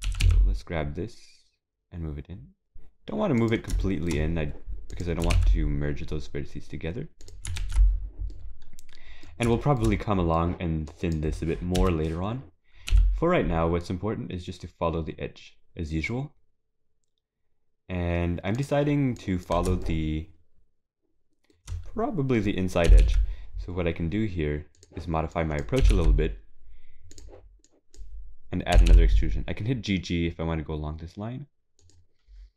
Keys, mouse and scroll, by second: 0.0 g, 3.8 shift+middle click, 4.2 scroll up 2, 8.0 scroll down 3, 8.3 middle click, 9.5 shift+middle click, 9.5 scroll down 2, 9.9 middle click, 10.9 click, 11.8 KP_3, 28.7 click.